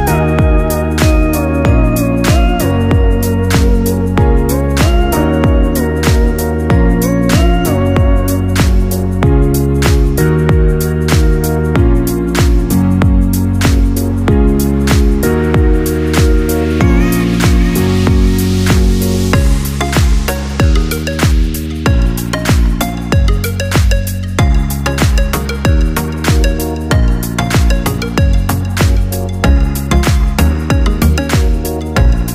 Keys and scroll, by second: 0.2 ctrl+-, 15.8 ctrl+z.